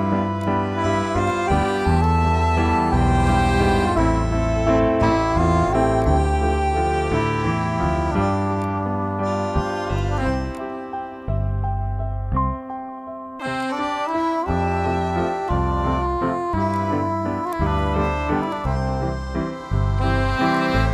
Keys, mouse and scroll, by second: 0.2 click, 5.7 click, 8.4 click, 13.4-16.5 drag, 20.4 click.